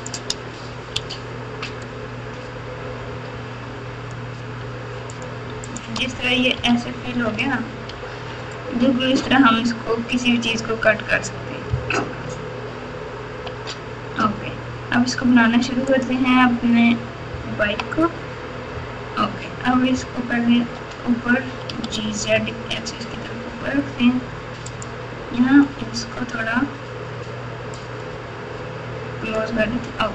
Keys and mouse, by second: 7.3 alt+z, 12.3 ctrl+z, 17.6 KP_3, 19.9 ctrl+KP_8, 20.6 ctrl+KP_8, 21.7 g, 24.7 z, 27.9 click, 28.7 click.